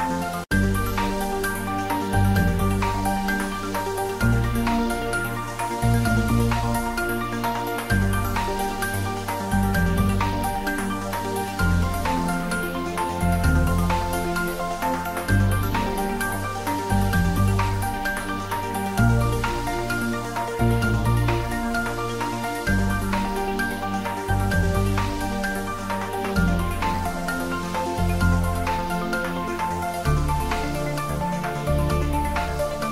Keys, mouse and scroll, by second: 1.1 s, 1.3 y, 4.3 click, 5.7 s, 5.9 x, 12.0 click, 14.1 s, 14.1 x, 18.1 x, 18.2 click, 18.9-19.9 scroll up 1, 20.3-20.8 scroll down 1, 22.2 s, 23.5 click, 24.3 s, 24.5 z, 31.2 click, 31.7 s, 32.8 click.